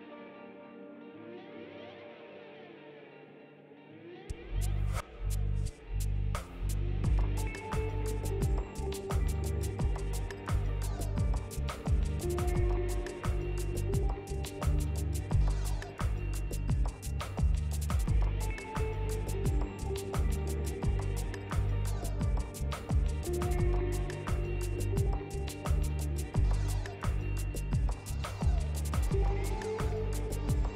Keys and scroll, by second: 3.8 ctrl+z, 12.4 s, 17.8 e, 20.2 r, 23.4 w.